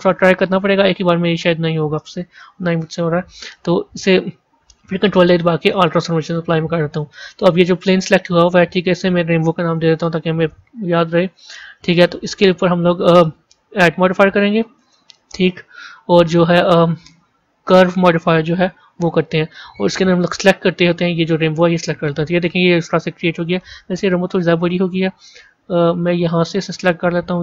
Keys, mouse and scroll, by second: 2.2 Tab, 2.5-3.0 scroll down 3, 4.7 ctrl+a, 8.7 click, 8.9-12.0 drag, 13.9-17.1 drag, 20.0 click, 24.0 b.